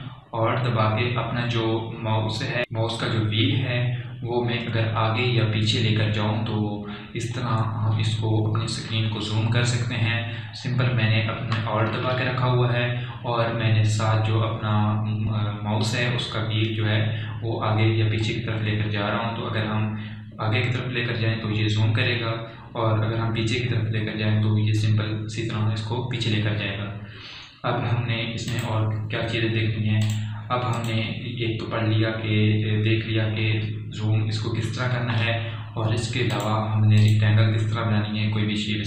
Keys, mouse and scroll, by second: 2.6 scroll up 1, 4.5-4.8 alt+scroll down 1, 7.9-8.3 alt+scroll up 1, 9.0 alt+scroll, 10.7-11.2 alt+scroll up 1, 11.4 alt+scroll down 1, 15.1 alt+scroll down 1, 19.2 alt+scroll up 1, 20.6 scroll, 20.7-21.3 alt+scroll down 1, 22.5-22.9 alt+scroll up 1, 24.7-25.9 alt+scroll down 1, 25.9 alt+scroll, 25.9 typing, 29.4 click, 37.3 click.